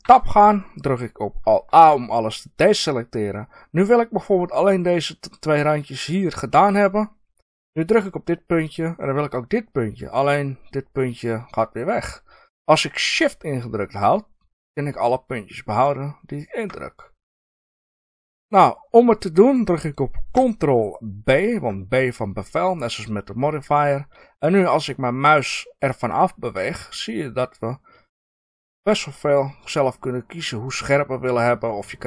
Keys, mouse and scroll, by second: 0.0 Tab, 1.7 alt+a, 7.8 click, 9.9 click, 14.7 shift+click, 15.6 shift+click, 21.3 ctrl+b.